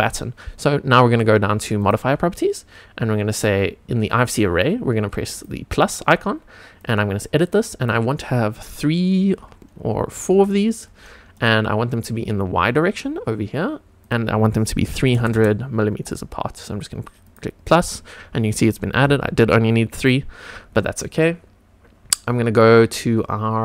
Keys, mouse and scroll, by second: 1.8 click, 5.3 click, 6.8 click, 7.8-10.8 drag, 14.0-15.9 drag, 15.3 KP_0, 17.2 click, 19.8-20.4 scroll up 2.